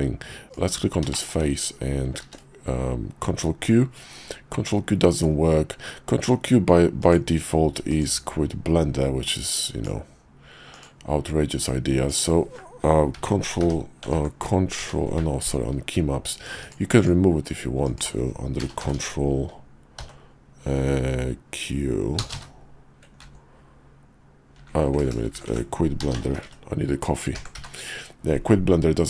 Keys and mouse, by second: 0.4 click, 1.1 shift+middle click, 2.2 ctrl+q, 7.0-8.0 drag.